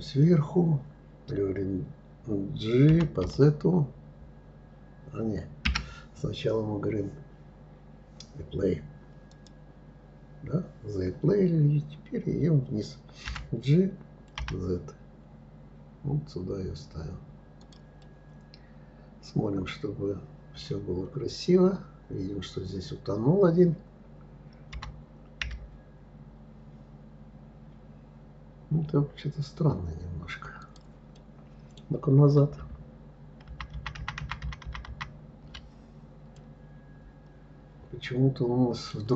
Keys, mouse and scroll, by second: 2.5 g, 9.0-11.9 drag, 17.7-20.5 middle drag, 20.5-21.0 scroll up 2, 30.8-33.1 middle drag, 33.1 ctrl+z, 33.4-34.5 ctrl+z, 35.3 scroll down 1, 36.0-39.0 middle drag.